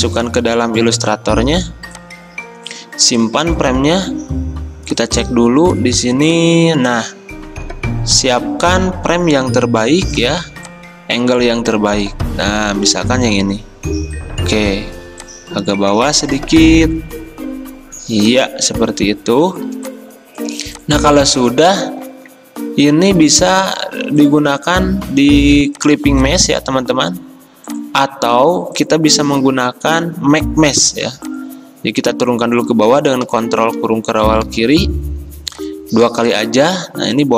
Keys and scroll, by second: 1.6 v, 5.2 v, 9.6 v, 22.2 ctrl+z, 33.4 ctrl+[, 33.9 ctrl+[.